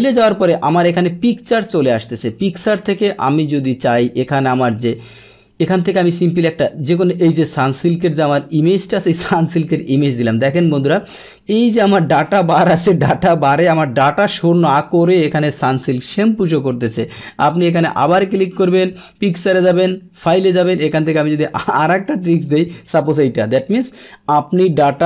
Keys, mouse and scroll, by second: 0.5 click, 5.3-6.4 drag, 8.8 click, 9.0 click, 10.7 click, 11.7 click, 17.4 click, 19.5 click, 22.2 click, 22.4 click.